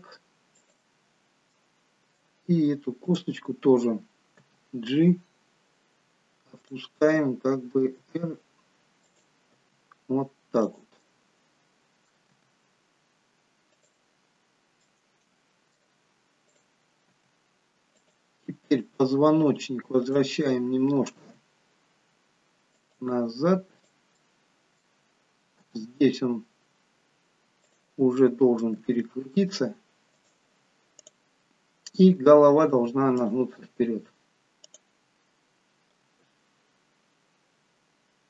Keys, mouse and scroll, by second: 1.7 middle click, 3.1 click, 4.5 g, 7.9 r, 9.5 g, 11.3 middle click, 12.6 g, 14.4-14.9 scroll up 2, 14.9 middle click, 16.5 click, 17.2 g, 18.8 click, 20.0 click, 21.3 r, 23.9 click, 25.6 middle click, 25.6 g, 28.8 r, 31.1 click, 32.3 r, 34.8 click, 36.1 g.